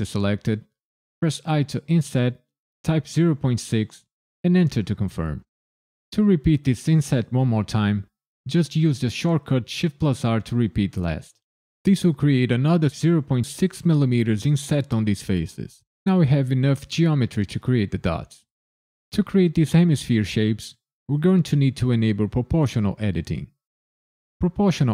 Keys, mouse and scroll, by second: 1.4 i, 2.8 KP_Decimal, 3.3 KP_6, 4.6 KP_Enter, 9.6 shift+r.